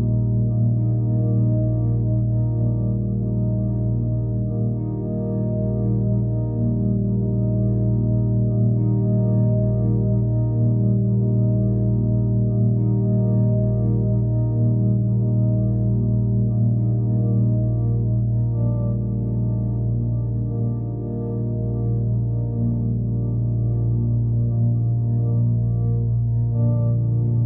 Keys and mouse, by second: 0.8 click, 1.8 s, 2.3 click, 2.8 g, 3.3 z, 4.4 click, 5.3 s, 5.8-7.4 drag, 7.5 click, 8.0 Home, 9.1 alt+click, 10.0 click, 10.3 click, 10.6 click, 11.6 click, 11.9 click, 12.5-14.4 typing, 12.6 click, 14.4 click, 15.6 click, 16.9-18.0 drag, 18.3-19.0 typing, 18.5-19.5 drag, 21.3 ctrl+alt+click, 22.3 click, 23.5-24.3 drag, 25.0-27.4 drag.